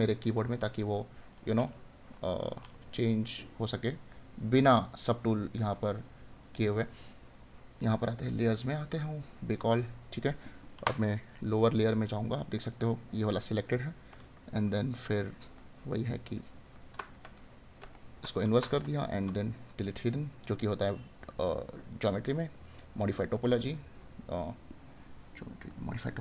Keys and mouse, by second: 13.4 right click, 17.1 right click.